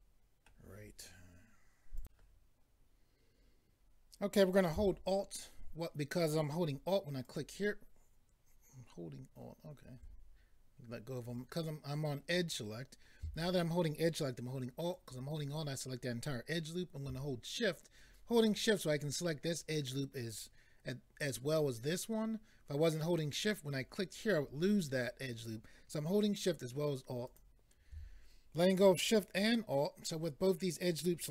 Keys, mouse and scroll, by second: 2.0 click, 7.2 alt+click, 11.2 click, 14.9 alt+click, 27.2 alt+click.